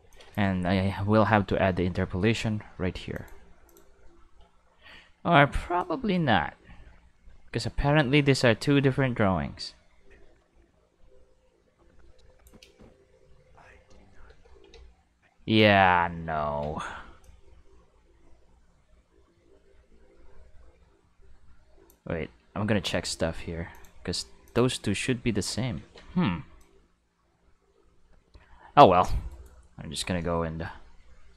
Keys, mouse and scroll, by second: 0.0 space, 0.1 click, 2.1 a, 3.1 click, 3.7 click, 5.8-12.4 drag, 12.6 space, 14.3 space, 14.7 ctrl+z, 15.6 ctrl+z, 17.2-21.9 drag, 22.7 a, 23.7 click, 24.4 click, 25.7 ctrl+z, 26.6-29.0 drag, 29.3 right click.